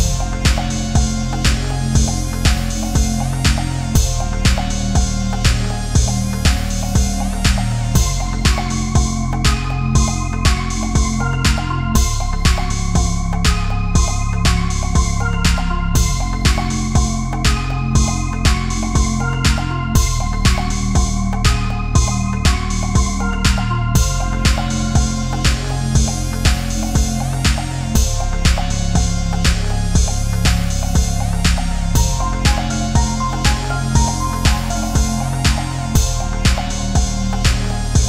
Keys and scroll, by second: 2.5 space, 4.8 space, 7.1 space, 22.5 space, 28.2 space, 32.5 ctrl+z.